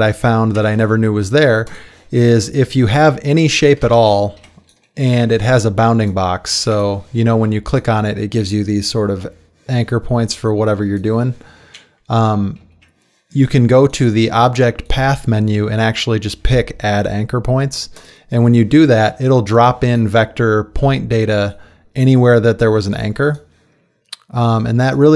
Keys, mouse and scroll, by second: 0.6 Delete, 4.4 z, 12.6 ctrl+z.